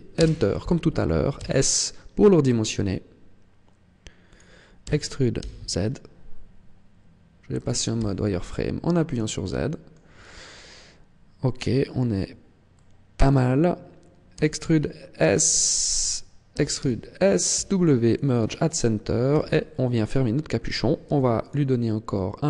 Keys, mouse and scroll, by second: 1.3 s, 4.4 click, 4.7 e, 7.6 click, 7.8 z, 8.4-8.8 scroll up 2, 9.2 shift+middle click, 12.6 middle click, 14.2 e, 16.0 click, 16.4 e, 17.4 click, 17.5 w, 19.2 z, 21.0 ctrl+r.